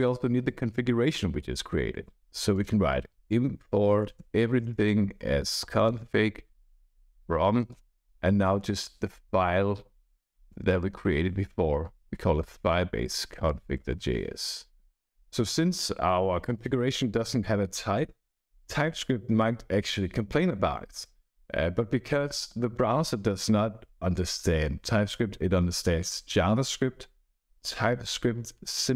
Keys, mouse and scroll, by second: 1.5-14.3 typing.